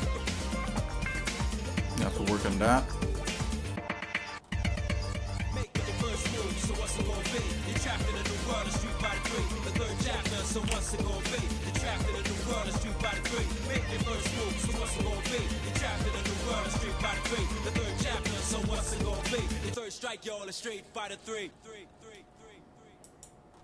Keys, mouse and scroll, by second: 0.0 middle click, 0.3 middle click, 0.9 scroll up 1, 1.4-2.5 shift+middle drag, 2.7 middle click, 3.4 shift+middle click, 4.4 scroll up 1, 5.0 scroll up 1, 5.4 middle click, 6.3-6.7 scroll up 3, 6.7-7.0 scroll down 1, 7.0 scroll up 1, 7.0 click, 7.6 shift+click, 8.2 shift+middle click, 9.3 middle click, 10.6 KP_7, 11.6 z, 12.9 middle click, 15.2-15.7 scroll down 3, 16.0 scroll up 1, 16.0 scroll down 1, 16.6 middle click, 17.1-17.7 scroll up 3, 17.7 scroll down 1, 18.6 g, 23.5 scroll up 2.